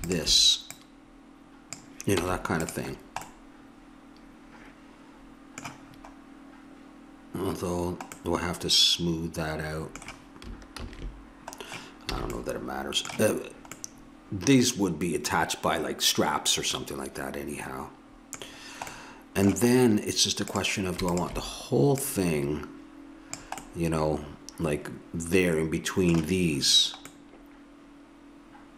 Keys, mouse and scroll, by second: 2.2 Tab, 5.9-8.7 middle drag, 10.7 ctrl+z, 12.1 a, 20.5-23.6 drag, 23.6-25.5 middle drag, 27.1-28.7 middle drag.